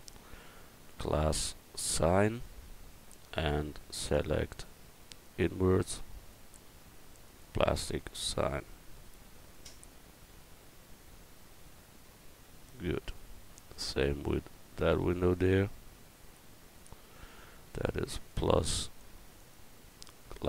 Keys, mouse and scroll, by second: 1.0-2.4 drag, 13.3 Tab, 16.3 Tab, 19.9-20.4 drag.